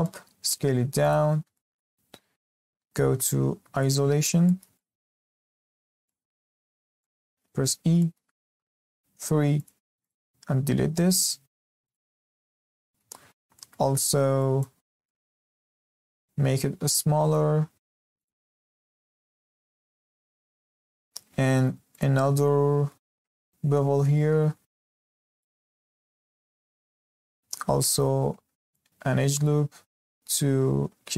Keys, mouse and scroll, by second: 0.0-0.5 shift+middle drag, 0.5 s, 1.3 scroll up 2, 1.5-3.6 shift+middle drag, 3.6 shift+h, 4.4-5.8 shift+middle drag, 5.8 scroll up 1, 6.1-6.4 shift+middle drag, 6.4 scroll up 2, 6.6 shift+middle click, 7.4 Tab, 7.7 scroll down 2, 7.9 shift+middle click, 8.5 3, 9.5 click, 10.0 click, 10.6 x, 12.1 scroll down 2, 12.3-13.1 middle drag, 13.1 z, 13.3 scroll up 1, 13.5 shift+middle click, 14.0 1, 14.4 click, 14.8 scroll down 2, 15.0 shift+middle click, 15.7 g, 18.7-19.6 shift+middle drag, 19.6 scroll up 2, 19.8 shift+middle drag, 20.0 z, 20.6 shift+middle click, 21.3 2, 21.9 alt+click, 22.8 ctrl+b, 25.6 scroll down 1, 25.8-26.6 middle drag, 26.6 scroll up 2, 26.9-27.9 shift+middle drag, 27.9 ctrl+r.